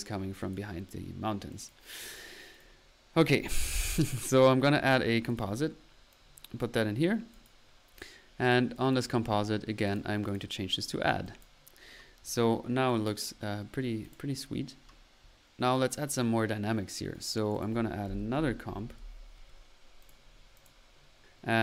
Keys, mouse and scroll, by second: 0.4 click, 0.9 middle click, 1.5 click, 2.5 right click, 3.6 right click, 4.8 right click, 5.3 right click, 6.9 middle click, 7.0 click, 7.2 middle click, 7.4 click, 7.5 click, 9.8 drag, 10.3-10.7 drag, 10.8-11.2 middle drag, 11.2-11.9 drag, 12.8 click, 13.1 click, 14.1-15.1 drag, 15.7-16.1 drag, 17.1-17.4 right drag, 17.5 right click, 17.5-18.8 typing, 20.9 middle click, 21.5 middle click.